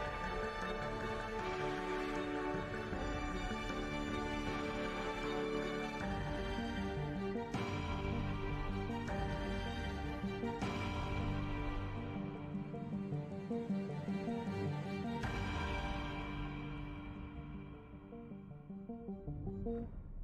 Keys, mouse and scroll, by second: 0.0 middle click, 2.9 right click, 3.9 right click, 5.1 right click, 6.0 KP_Decimal, 6.9 middle click, 9.4 middle click, 9.8-12.0 typing, 12.6 ctrl+p, 13.7 z, 14.9 g, 16.0 right drag, 16.2 h, 17.5 alt+h, 18.3-20.2 typing.